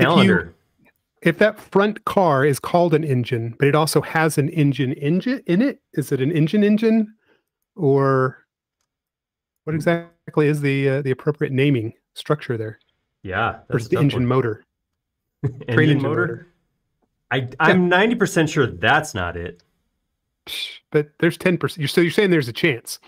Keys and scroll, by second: 2.0 typing, 3.6 super+z, 5.8 m, 7.2 Up, 9.8 space, 10.3 e, 13.2 typing, 14.4 space, 22.5 l.